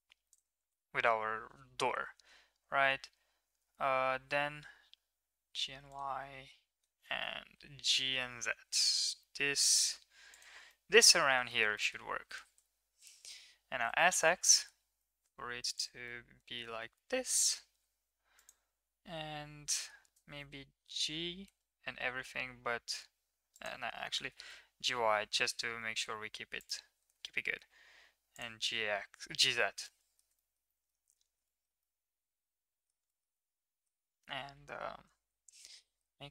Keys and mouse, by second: 0.8 g, 6.2 z, 10.8 middle drag, 11.5 shift+middle click, 11.8 middle click, 12.6 KP_1, 13.8 s, 16.2-16.6 middle drag, 17.1-17.6 middle drag, 19.8 middle click, 20.2 g, 24.3 g, 28.7-30.3 middle drag, 30.5 shift+middle click, 30.8 middle click, 31.6 shift+middle click, 32.0-33.0 middle drag, 33.1 shift+middle click, 33.5 middle click, 34.5 KP_3, 35.8 g.